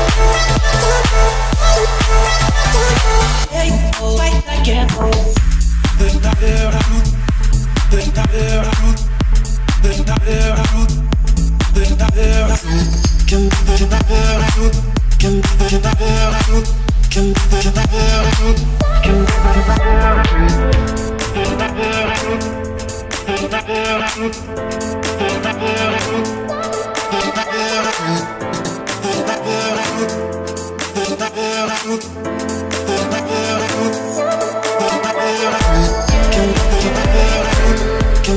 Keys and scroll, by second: 4.4 1, 4.5 0, 4.9 Return, 7.7 5, 8.1 Return, 10.3 o, 13.2 Escape, 13.9 0, 14.0 Return, 17.5 0, 17.7 Return, 20.3 Escape, 22.1 o, 24.8 Escape, 26.3 0, 26.4 Return, 31.6 0, 31.7 Return, 35.4 Escape, 36.3 o.